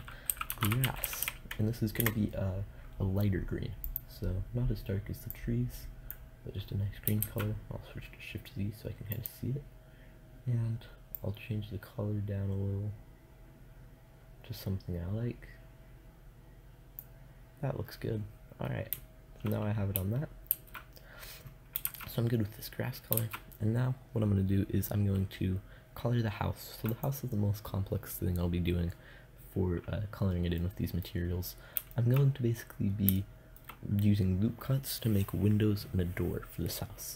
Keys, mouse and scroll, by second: 0.7 s, 6.7 shift+z, 8.6-10.7 drag, 20.0 shift+z, 21.3 shift+z, 22.6 shift+z, 23.9 middle click.